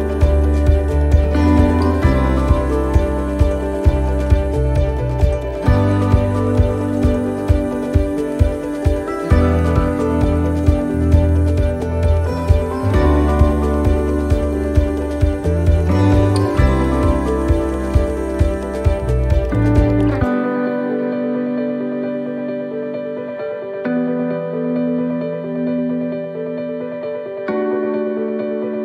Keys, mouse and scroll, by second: 5.9 click, 7.6 middle click, 9.9 s, 11.7 middle click, 13.4 scroll up 1, 14.0 middle click, 14.7 scroll up 2, 15.9 right click, 16.5 alt+shift+right click, 17.7 right click, 18.3 alt+shift+right click, 20.7 alt+shift+right click, 22.6 ctrl+z, 23.2 alt+shift+right click, 25.1 alt+shift+right click, 25.8 x, 28.3 ctrl+z.